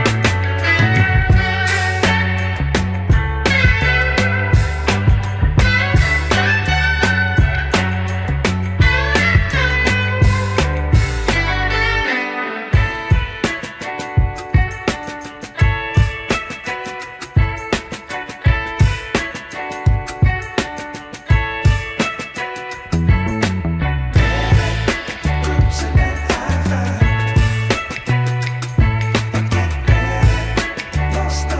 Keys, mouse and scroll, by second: 4.0 e, 5.1 s, 7.1 g, 9.7-10.2 scroll up 4, 10.2 shift+middle click, 13.2 e, 17.6-18.1 scroll down 3, 18.1 shift+middle click, 18.8 Tab, 19.5-19.9 shift+middle drag, 25.6-26.1 shift+right drag, 26.8 scroll up 4, 27.3 shift+middle drag, 28.3 ctrl+z, 30.5 Tab, 31.2 shift+s.